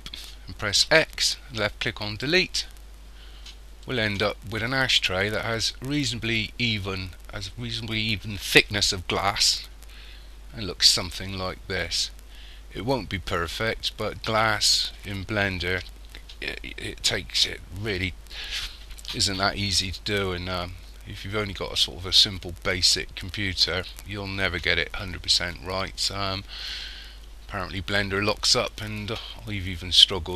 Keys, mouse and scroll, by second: 0.9 x, 3.9 middle click, 10.2-14.0 scroll up 6.